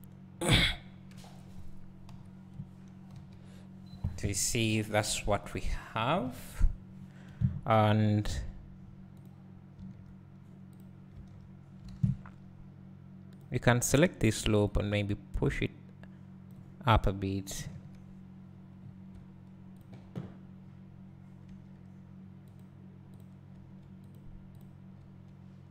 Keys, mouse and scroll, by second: 0.3-2.1 scroll down 2, 2.1 KP_1, 2.2 KP_1, 3.1 KP_3, 5.5 click, 6.2 KP_3, 6.4 KP_3, 7.7 scroll up 2, 9.2 click, 11.3 Tab, 11.9 alt+a, 13.4 click, 14.8-18.9 drag, 17.7 KP_1, 18.8-19.8 scroll up 2, 18.9 middle click, 19.8 shift+click, 21.4 g, 23.2 click, 23.5 g, 24.6 click, 25.2 g.